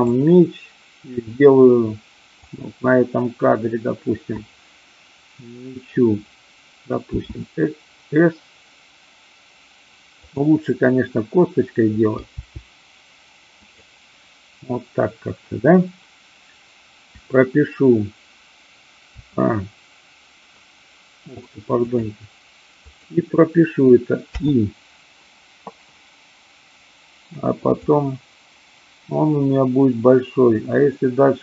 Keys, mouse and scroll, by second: 2.5 click, 7.0 s, 10.2 click, 12.2 g, 13.6 click, 22.7 click, 27.8-31.4 drag.